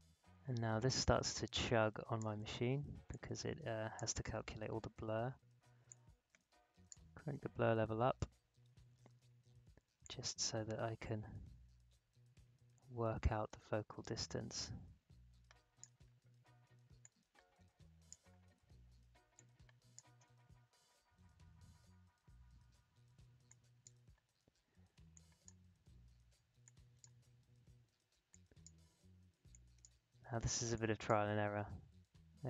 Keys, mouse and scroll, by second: 0.1 alt+scroll up 1, 1.2 space, 1.5 click, 1.7 space, 3.1-5.8 drag, 5.8-9.7 drag, 10.0 click, 10.0-20.5 drag, 20.5-21.7 alt+scroll down 1, 21.9-22.5 alt+scroll up 1, 23.4-32.4 drag.